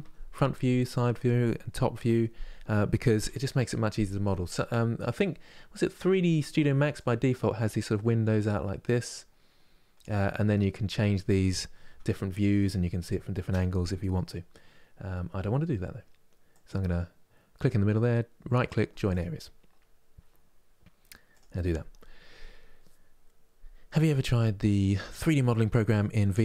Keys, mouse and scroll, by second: 6.6-11.6 drag, 11.6 KP_1, 18.8-26.4 right drag.